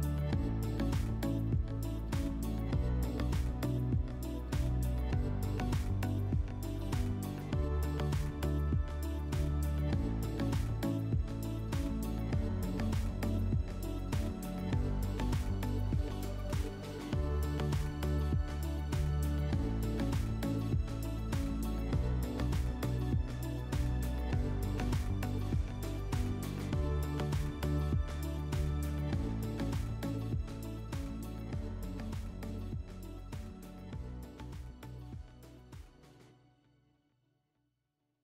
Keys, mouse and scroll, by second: 1.4 click, 8.9 Escape, 13.8 alt+middle click, 15.8 click.